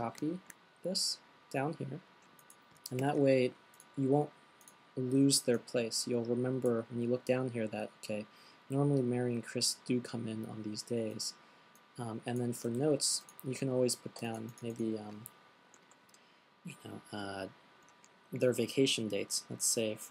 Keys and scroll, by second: 0.3 super+c, 3.4 super+v, 13.0 fn+Delete.